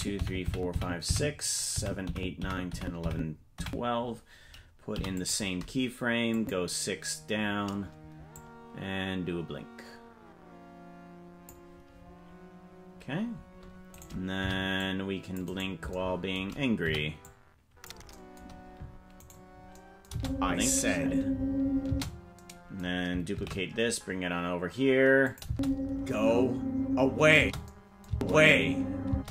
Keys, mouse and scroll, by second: 0.2 Right, 0.5 Right, 0.8 Right, 1.1 Right, 1.8 Right, 2.1 Right, 2.4 Right, 2.8 Right, 3.1 Right, 3.6 Right, 4.9 i, 6.3 click, 8.3-11.5 drag, 13.9 right click, 14.4 c, 15.5 right click, 16.8 c, 20.1 space, 21.9 space, 23.3 shift+d, 25.4 space, 27.5 space, 28.0 space, 29.1 space.